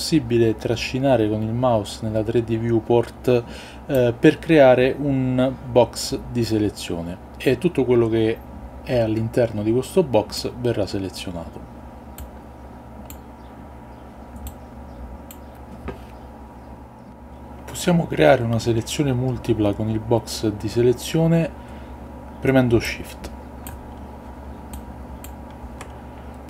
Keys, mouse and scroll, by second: 4.0-10.6 drag, 12.2-13.3 drag, 14.3-15.4 drag, 22.8-23.9 shift+drag, 24.8-25.3 shift+drag, 25.7 ctrl+z.